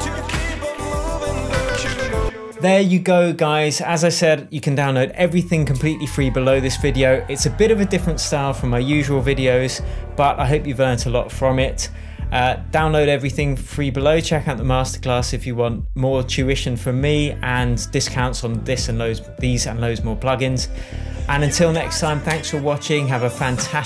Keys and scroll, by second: 2.5 super+s.